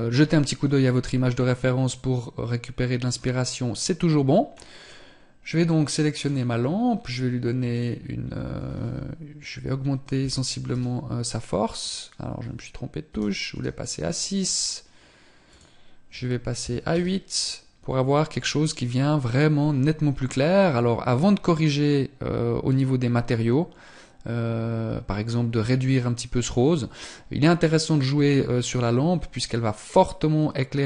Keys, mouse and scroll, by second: 6.0 click, 7.5 click, 15.2 click.